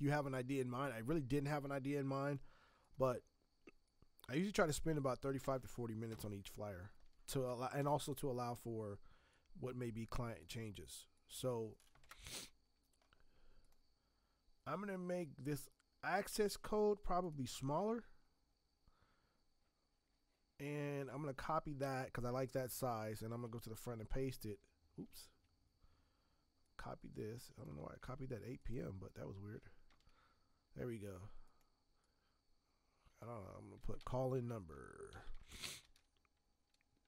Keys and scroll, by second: 2.6 t, 5.4 space, 7.4 space, 12.0 ctrl+Return, 21.7 ctrl+c, 23.7 ctrl+v, 25.1 ctrl+z, 28.0 ctrl+c, 29.8 ctrl+v, 33.5-37.0 typing.